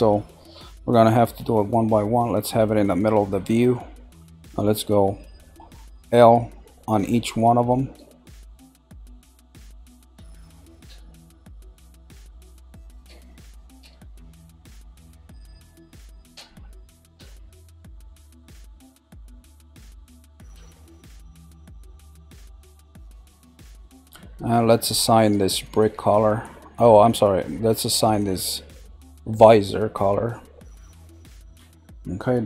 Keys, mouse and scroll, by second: 1.1-1.7 scroll up 1, 1.7-4.7 shift+middle drag, 5.8 l, 6.9 typing, 29.0 click, 31.1 click.